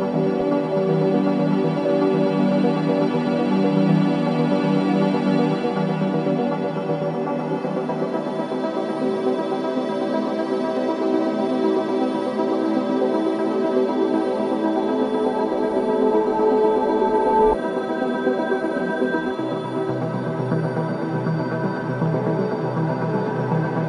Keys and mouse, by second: 0.6 shift+click, 1.8 ctrl+i, 2.8 Return, 4.0 click, 5.2 click, 5.7 click, 6.4 shift+click, 9.2-10.6 drag, 11.3 click, 12.9-13.9 middle drag, 13.9 click, 14.7 middle click, 15.1 click, 15.6-16.9 middle drag, 16.9-19.3 drag, 19.4 click, 20.1-22.2 alt+drag.